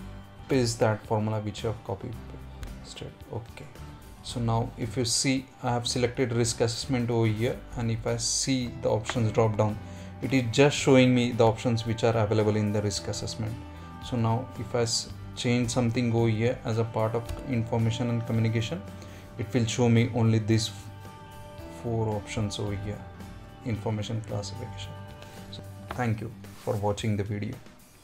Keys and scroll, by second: 0.3 ctrl+v.